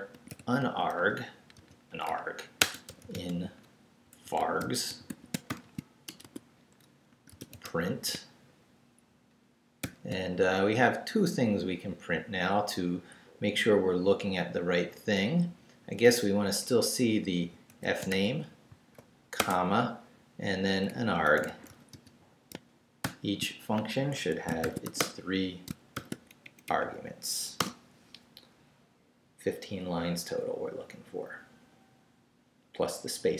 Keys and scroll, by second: 0.0-1.6 typing, 2.6-8.6 typing, 6.1 shift+Return, 6.2 Tab, 9.8 shift+9, 17.1-18.6 typing, 20.9-23.0 typing, 24.1 shift+Escape, 24.4-26.0 typing, 25.7 shift+Return, 26.4 shift+Up, 27.6 Return.